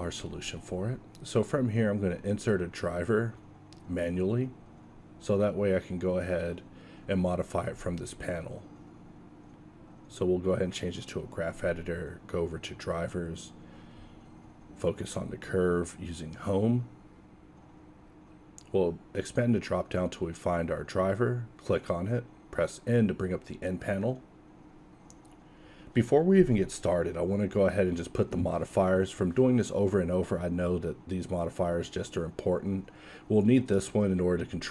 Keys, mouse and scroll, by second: 3.5-6.1 middle drag, 18.6-30.0 drag.